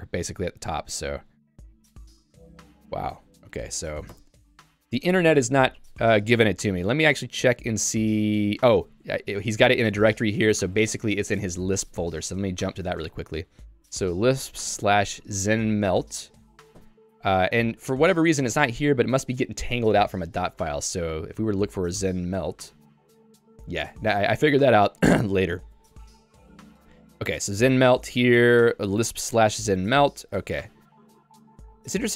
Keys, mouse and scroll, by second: 11.5 Escape, 12.3 super+e, 12.9-15.5 typing, 16.8 shift+h, 18.6 q, 21.0-22.1 typing, 23.6 Return, 23.9 n, 26.4 n, 27.5 j, 28.8-29.9 l, 30.4 j.